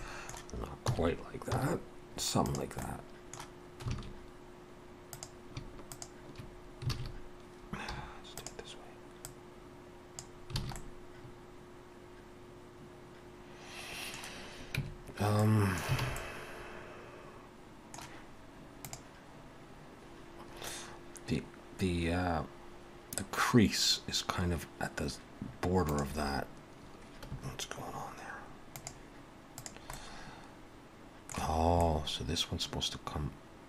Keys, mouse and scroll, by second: 0.0 middle click, 0.9 s, 2.8 middle click, 3.9 alt+a, 5.1 click, 6.0 shift+click, 6.9 alt+a, 7.9 3, 8.4 click, 10.6 alt+a, 10.8 middle click, 14.8 Tab, 15.4 middle click, 16.0 alt+a, 16.2 middle click, 29.6 click, 29.9 middle click, 31.6 scroll up 2, 31.8 middle click.